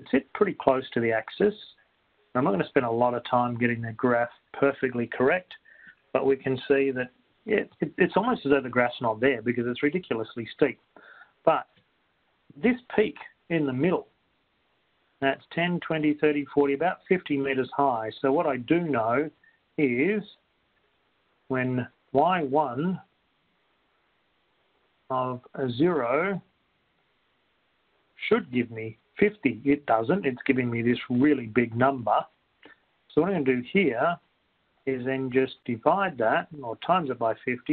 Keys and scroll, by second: 3.1 7, 4.2 Return, 4.2 Right, 4.2 7, 23.5 1, 24.1 (, 24.5 0, 26.1 ), 27.5 Return, 35.1 Right.